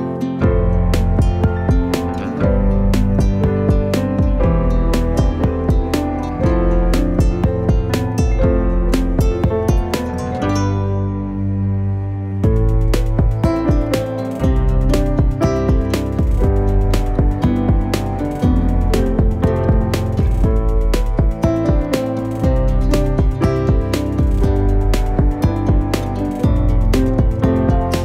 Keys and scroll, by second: 1.4 e, 4.5 3, 5.2 shift+d, 5.4 y, 6.5 shift+d, 6.9 y, 9.2 alt+d, 9.6 alt+d, 10.2 alt+d, 10.8 alt+d, 11.5 3, 11.9 g, 12.7 g, 13.5 g, 14.9 g, 15.0 y, 15.9 g, 16.1 z, 18.0 shift+d, 18.2 z, 19.6 g, 20.0 x, 21.2 g, 21.5 y, 23.1 x, 24.2 g, 24.3 x, 27.3 g, 27.5 z.